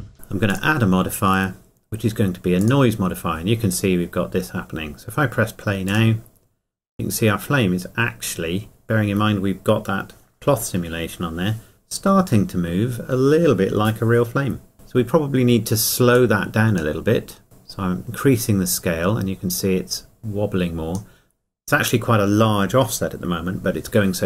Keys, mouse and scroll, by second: 0.5 click, 5.9 click, 7.8 scroll up 1, 16.4 click.